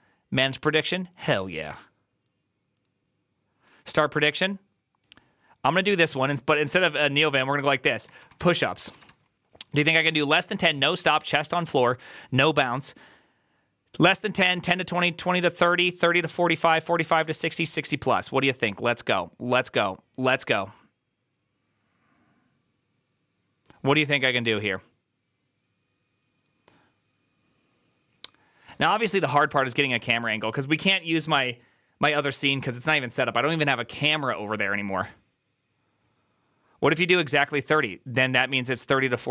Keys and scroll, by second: 8.8 typing.